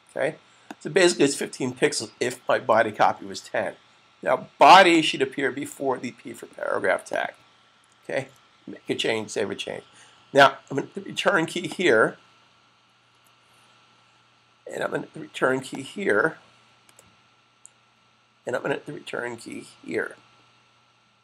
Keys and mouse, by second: 3.4 super+s, 4.8 click, 7.8 click, 8.1 super+s, 11.5 click.